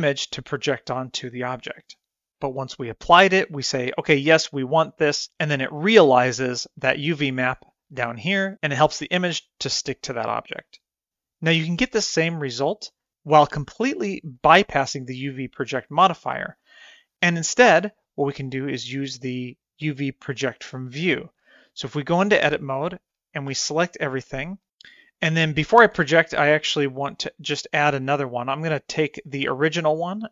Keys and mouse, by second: 19.9 Tab, 22.0 middle click, 22.8 middle click, 23.5 a, 28.6 click.